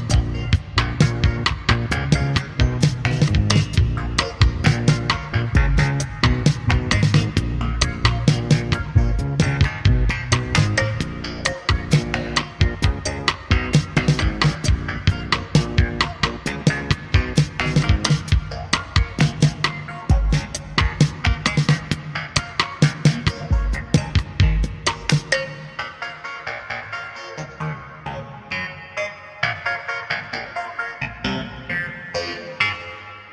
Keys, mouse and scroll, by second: 0.5 middle click, 6.7 click, 8.0 middle click, 16.5-20.5 drag, 20.7 scroll down 2, 22.9 middle click, 23.9-26.3 middle drag, 31.0 middle click, 32.1 click.